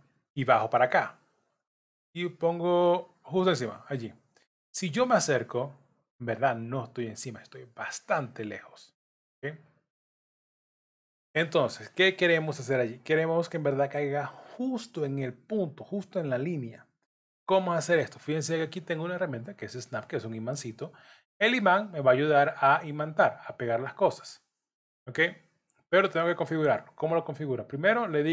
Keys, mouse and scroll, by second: 4.7-5.7 scroll up 12, 6.8-7.5 scroll up 1, 9.2 ctrl+z, 10.2-10.6 scroll down 2, 11.5 scroll down 8, 16.8 scroll up 2, 17.0-17.5 scroll down 4, 21.9 click, 26.5 click.